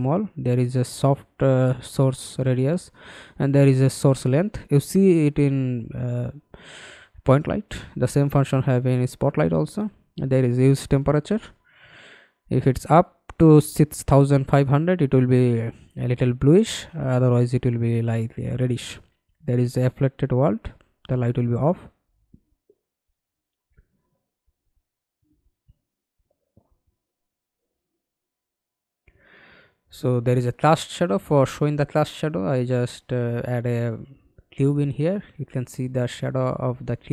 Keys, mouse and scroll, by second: 8.6-11.6 scroll down 1, 16.3 double click, 17.0-17.5 scroll down 2.